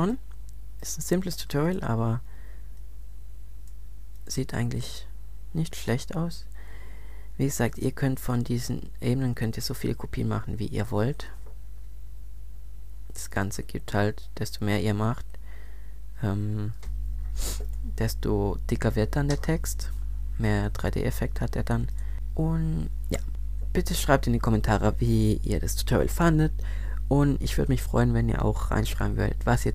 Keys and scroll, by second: 12.8 super+Up, 16.7 super+z.